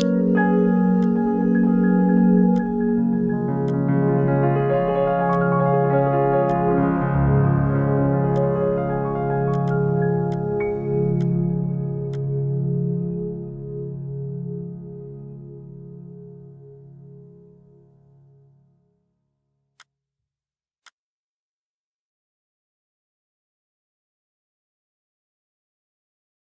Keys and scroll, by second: 0.1 ctrl+g, 0.2 ctrl+3.